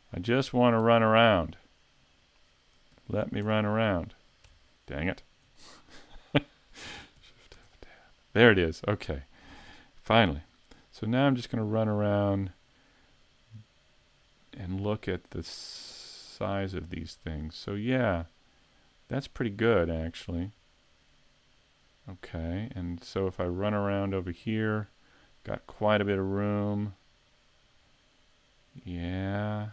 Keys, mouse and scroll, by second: 0.3 shift+middle click, 0.9 middle click, 2.9 shift+f, 4.1 shift+f, 5.6 shift+middle click, 7.2 shift+f.